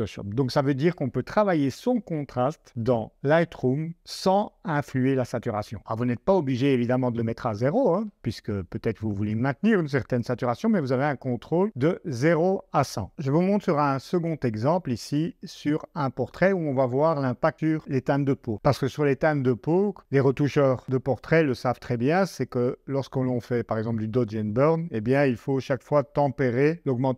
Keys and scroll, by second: 6.2 super+Tab.